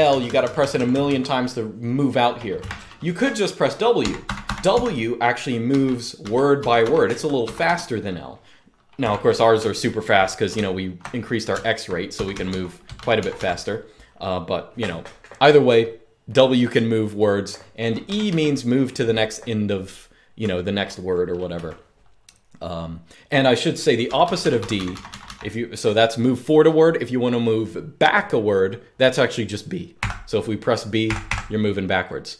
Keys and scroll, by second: 0.0-0.8 typing, 2.3 0, 3.7-7.4 typing, 8.7-11.5 typing, 12.7-13.4 typing, 17.8 typing, 20.1 typing, 21.2 typing, 23.5-25.3 typing, 29.7 typing, 30.8 typing.